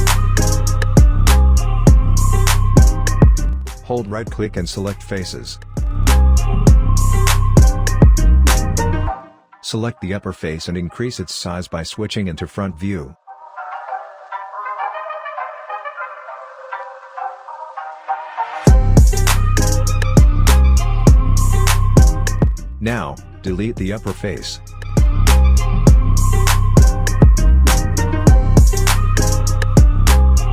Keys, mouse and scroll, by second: 1.2 scroll down 1, 2.1 alt+click, 3.0 alt+middle click, 4.4-5.8 right drag, 5.8 click, 7.1 space, 9.2 r, 10.2-14.9 drag, 14.9 space, 16.7-18.5 right drag, 18.5-18.9 scroll up 1, 19.0-21.6 alt+drag, 21.6-23.0 right drag, 23.0 click, 25.4-26.7 alt+middle drag, 26.7 right click, 27.8 click, 30.0-30.5 right drag.